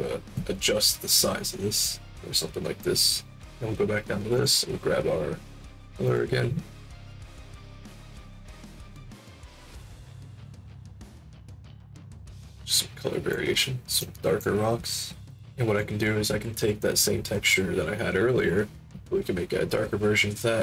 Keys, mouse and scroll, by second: 1.7 click, 4.3 click, 5.6 click, 6.0 click, 8.4 click, 9.0-12.4 drag, 12.5 alt+click, 13.7 alt+middle click, 13.9 alt+click, 15.3 alt+click, 16.5 middle click, 16.8 middle click, 17.0 middle click, 17.6 middle click.